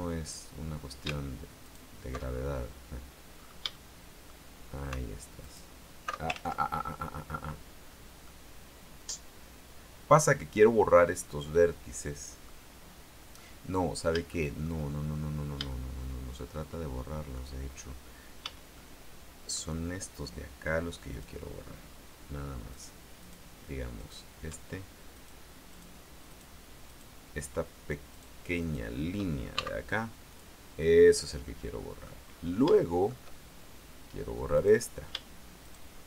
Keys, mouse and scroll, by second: 0.1-0.8 scroll up 1, 1.8 alt+shift+right click, 2.5 alt+shift+scroll down 1, 3.5-3.9 scroll up 3, 3.9 shift+middle click, 5.6 alt+shift+right click, 6.5 ctrl+alt+shift+z, 7.0-7.5 ctrl+alt+shift+scroll up 3, 7.9-8.2 scroll down 2, 8.4-12.8 middle drag, 13.5-15.0 middle drag, 15.1-16.7 shift+middle drag, 16.9 shift+middle click, 18.6 a, 18.9 middle click, 21.3 click, 22.9 right click, 23.4 right click, 24.1 right click, 25.3 shift+right click, 25.9 shift+right click, 26.5 shift+right click, 27.1 shift+right click, 28.3 shift+right click, 28.7 shift+right click, 29.7 shift+x, 30.5 click, 31.2-31.6 scroll down 2, 31.6 middle click, 32.4-32.9 scroll up 3, 32.9 shift+middle click, 34.7 right click, 35.8 shift+right click.